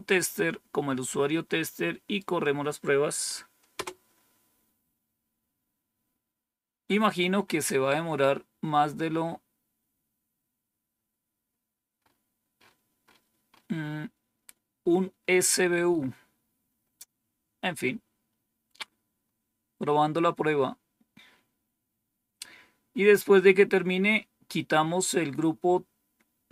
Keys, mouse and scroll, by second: 1.0-2.1 right drag, 3.6 Return, 11.9 scroll up 1, 16.6-17.2 scroll down 2, 17.2 scroll down 1, 17.8 scroll down 2.